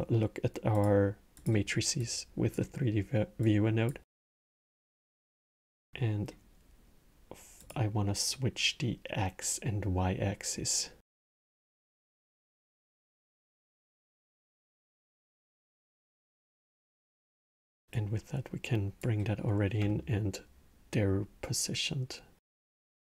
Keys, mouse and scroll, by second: 1.8 click, 3.2 click, 5.0-7.4 alt+middle drag, 7.4 click, 11.0-11.8 alt+middle drag, 11.8 scroll, 12.4-13.8 alt+middle drag, 13.8 click, 14.6 x, 15.0 middle click, 15.3 scroll, 16.3 click, 17.7 click, 19.7-22.9 alt+middle drag.